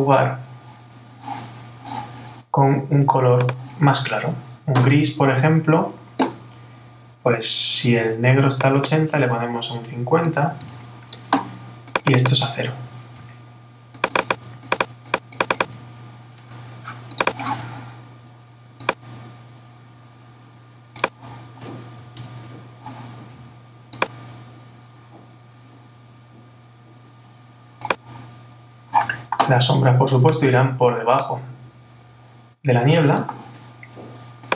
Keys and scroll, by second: 22.2 super+-.